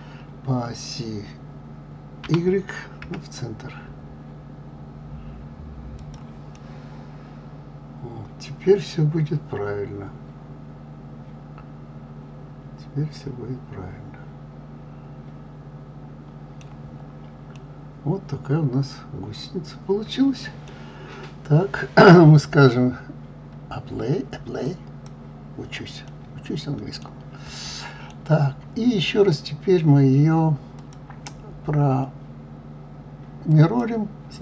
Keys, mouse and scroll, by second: 2.2 g, 6.5-9.6 middle drag, 16.9 scroll down 2, 17.5-20.6 middle drag, 24.6 click, 26.1-30.7 middle drag, 30.7-33.8 drag.